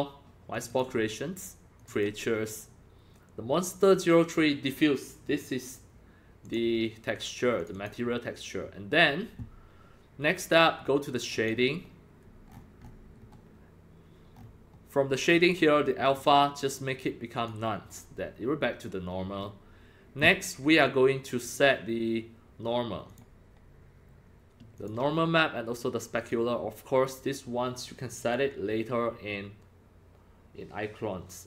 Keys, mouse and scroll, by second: 0.5 click, 0.7 click, 1.8 click, 1.9 click, 6.4 click, 7.6 click, 7.7 click, 11.3 click, 12.5-12.9 scroll up 9, 13.2 scroll down 2, 14.3-14.8 scroll up 6, 16.2 click, 17.4 click, 19.3-20.1 scroll down 4, 20.6 scroll, 20.7 click, 23.1 click, 24.7 click, 26.1 click.